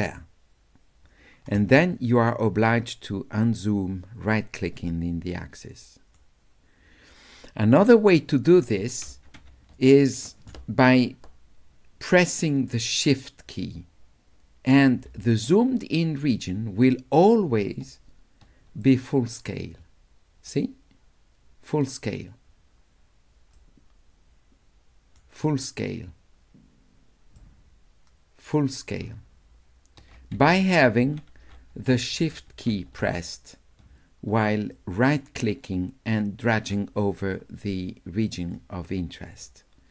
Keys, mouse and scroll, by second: 2.7-6.2 right drag, 8.3 click, 9.8 ctrl+click, 18.8-20.5 shift+right drag, 23.6-25.1 shift+right drag, 27.4 shift+right click, 27.6 shift+click, 29.1-30.1 shift+scroll down 1, 30.1-32.7 scroll down 2, 34.7-36.7 shift+right drag, 37.3-38.5 shift+drag, 39.4-39.9 shift+right drag.